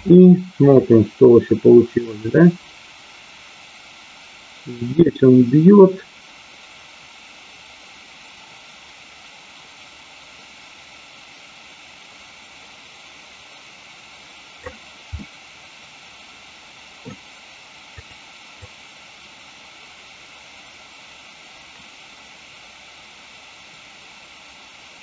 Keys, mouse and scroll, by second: 0.8-14.7 drag, 15.2-17.0 middle drag, 17.9 click, 18.6-25.0 drag.